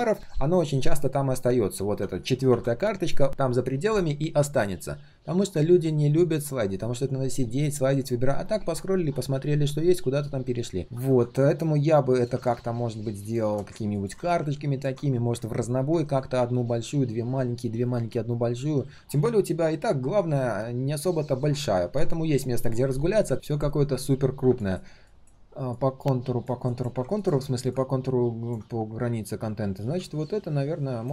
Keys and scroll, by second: 18.8 ctrl+z.